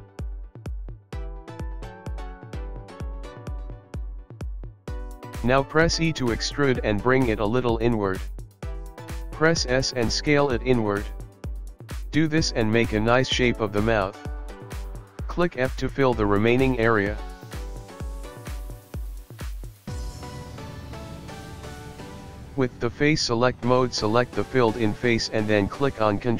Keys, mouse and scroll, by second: 0.2 click, 0.4 shift+click, 0.6 shift+click, 0.7 shift+click, 0.8 shift+click, 0.9 shift+click, 1.1 shift+click, 1.2 shift+click, 1.4 shift+click, 1.5 shift+click, 1.8 shift+click, 1.9 shift+click, 2.3 shift+click, 2.7 shift+click, 3.6 shift+click, 4.3 scroll down 5, 4.4 middle click, 5.7 click, 6.4 click, 6.6 KP_3, 7.8 middle click, 8.5 e, 10.4 e, 10.9 middle click, 11.8 e, 12.8 s, 14.0 e, 15.4 s, 15.4 e, 16.1 s, 16.9 f, 17.0 click, 17.2 middle click, 22.0 click, 22.7 click, 23.6 middle click, 24.5-25.3 scroll up 5.